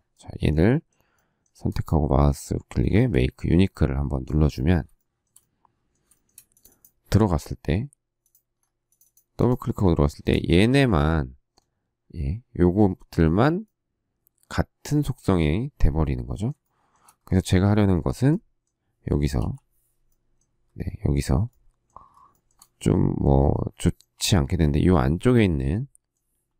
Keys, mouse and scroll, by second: 5.0 shift+middle click, 6.1 shift+middle click, 6.2 shift+middle click, 10.0 shift+middle click, 16.6 shift+middle click, 19.3 k, 22.3 shift+middle click.